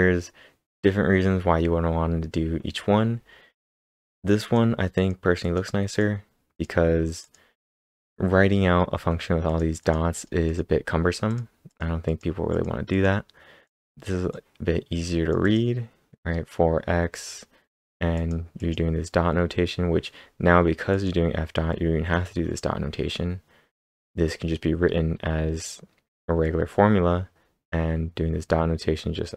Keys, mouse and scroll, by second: 3.6 click, 3.6-4.1 scroll down 1, 4.1 click, 4.4 click, 5.0 click, 5.4 click, 6.6 click, 7.2 click, 9.5 click, 9.8 click, 10.5 click, 11.3 click, 11.7 click, 12.1 click, 12.9 click, 13.7 click, 14.4-15.1 typing, 14.6 click, 15.4 double click, 18.1 click, 18.4-19.1 typing, 18.6 click, 20.9 click.